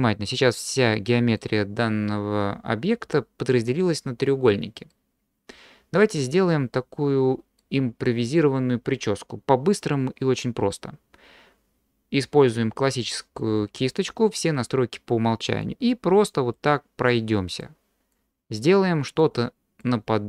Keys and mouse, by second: 0.3 middle click, 0.7 click, 0.7 right click, 4.9 middle click, 5.4 click, 5.4 right click, 6.2-7.6 middle drag, 15.6 click, 17.1 click, 18.1 click, 19.2 click.